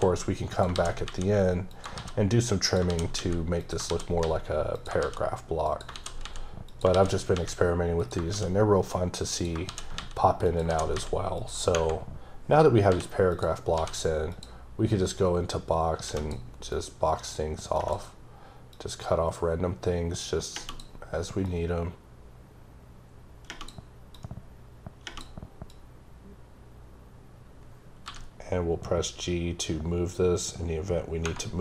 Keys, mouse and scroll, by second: 0.5 click, 0.7 shift+d, 1.7 click, 2.0 shift+d, 2.6 click, 2.8 shift+d, 3.6 click, 3.9 shift+d, 4.7 click, 5.0 shift+d, 5.7 click, 5.9 shift+d, 6.7 click, 6.9 shift+d, 8.0 click, 8.3 shift+d, 9.3 click, 9.7 shift+d, 10.4 click, 10.7 shift+d, 11.4 click, 13.3 click, 13.7 d, 14.3 click, 15.1 click, 16.7 click, 18.7 click, 21.4 click, 24.1 click, 25.7 click, 28.1 g.